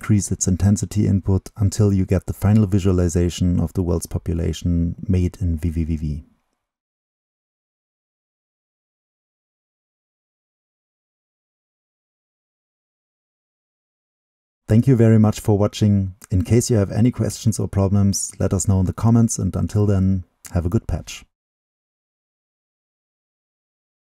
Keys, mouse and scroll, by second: 1.2-4.1 drag, 4.1-5.5 middle drag, 5.5-8.4 right drag, 8.4-11.4 middle drag, 12.7-16.2 drag.